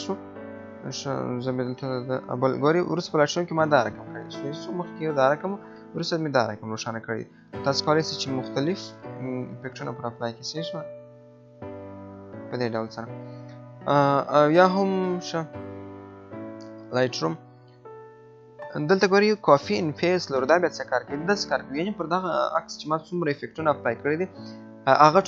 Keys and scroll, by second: 1.6 Left, 4.3 Right, 5.5 Left, 7.3 Right, 7.9 Left, 8.3 Right, 8.5 Left, 9.2 Right, 10.0 Left, 10.4 Right, 10.6 Left, 11.2 Right, 11.6 Left.